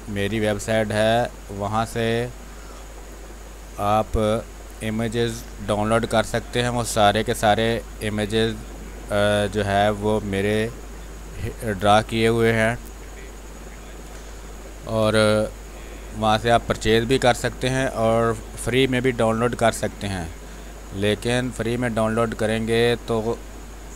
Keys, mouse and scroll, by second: 0.7-4.1 drag, 4.1 space, 4.2 click, 4.5 space, 5.2-13.1 drag, 13.1 space, 13.3 click, 13.6 space, 15.9 x, 16.6-21.2 drag, 21.2 space, 21.3 click, 21.6 space, 22.5-23.9 drag.